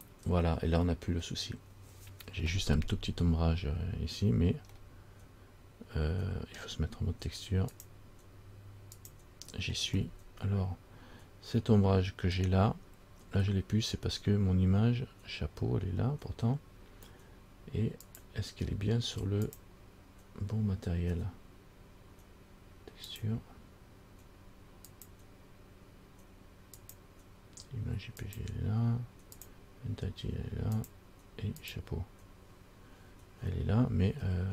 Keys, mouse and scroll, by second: 4.4 scroll up 1, 5.0 middle click, 7.9 click, 10.2 middle click, 18.3 click, 19.7 click, 23.3 click, 25.1 click, 28.4 click, 31.0 click, 32.0 click.